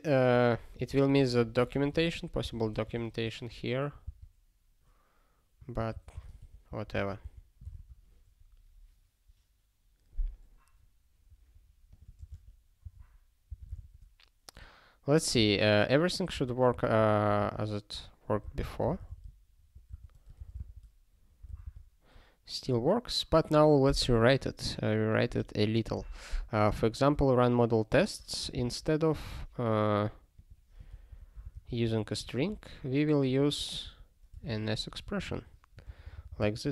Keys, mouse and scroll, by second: 0.3 ctrl+p, 0.7 ctrl+n, 0.9 ctrl+p, 1.1 ctrl+p, 2.1 ctrl+a, 2.4 Return, 2.5 ctrl+p, 2.7 Tab, 3.0 ", 3.3 ", 4.0 ctrl+b, 5.8 ctrl+n, 5.9 ctrl+n, 6.1 ctrl+space, 6.2 ctrl+p, 6.4 ctrl+p, 6.9 ctrl+w, 7.2 ctrl+k, 7.7 ctrl+s, 10.6 scroll down 1, 11.9 click, 12.2 ctrl+space, 12.8 ctrl+w, 13.5 ctrl+k, 13.8 ctrl+s, 16.4 alt+x, 17.4 Return, 18.4 super+b, 21.6 super+b, 27.1 click, 27.9 ctrl+a, 28.5 Return, 28.6 ctrl+p, 30.4 click, 31.2 ctrl+alt+@, 31.5 alt+w, 31.9 ctrl+p, 32.3 ctrl+y, 33.2 click, 33.5 ctrl+a, 33.8 ', 34.5 ctrl+alt+@, 34.8 Tab, 35.3 ctrl+s, 35.8 ctrl+n, 36.0 ctrl+n, 36.6 ctrl+a.